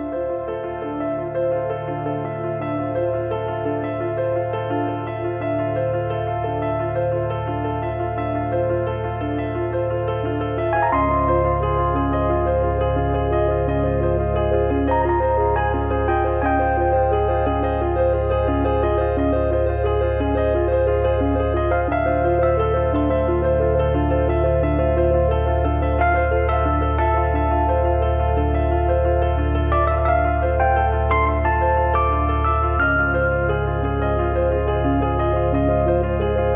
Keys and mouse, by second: 1.0 click, 1.8 click, 2.6 click, 3.3 click, 3.9 click, 4.5 middle click, 4.9 click, 5.8 click, 6.7 middle click, 7.0 click, 7.8 middle click, 8.1 click, 9.0 middle click, 10.5 middle click, 11.7 shift+b, 12.3 shift+b, 12.5 middle click, 12.7 middle click, 13.3 click, 13.9 click, 15.2 click, 16.4 click, 17.0 click, 17.7 click, 18.3 click, 19.4 click, 20.2 click, 21.2 click, 22.0 shift+h, 22.4 click, 24.6 shift+b, 25.4 click, 25.9 middle click, 26.1 middle click, 26.5 KP_1, 26.7 KP_3, 26.9 middle click, 27.6 middle click, 27.9 shift+middle click, 30.2 click, 30.8 middle click, 31.3 KP_3, 32.7 click, 33.8 click, 34.2 middle click, 35.2 shift+r, 35.7 click.